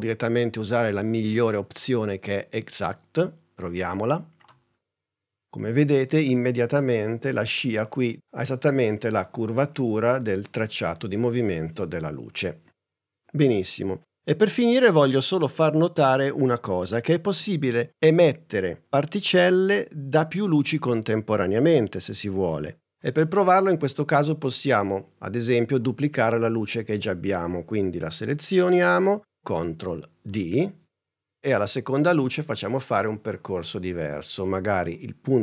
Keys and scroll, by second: 30.4 super+d.